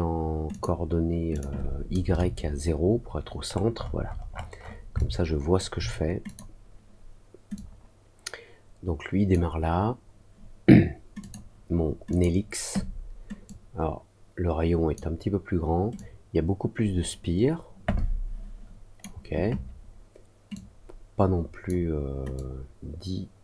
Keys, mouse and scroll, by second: 0.4 click, 1.3 click, 3.4 middle click, 3.7 middle click, 4.5 middle click, 4.9 alt+click, 6.2 click, 7.5-9.3 drag, 11.1 click, 12.0 click, 13.4-14.9 drag, 15.9-18.9 drag, 20.5-21.6 drag, 22.3-23.4 drag.